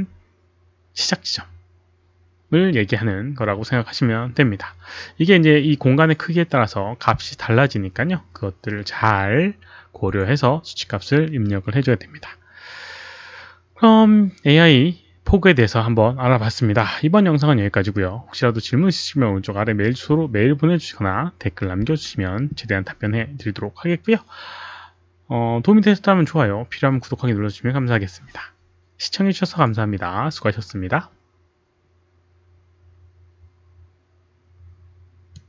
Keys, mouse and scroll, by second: 35.3 click.